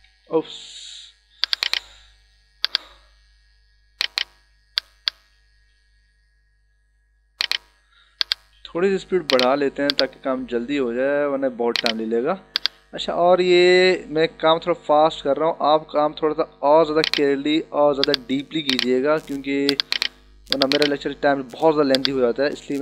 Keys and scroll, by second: 0.5 d, 1.7 space.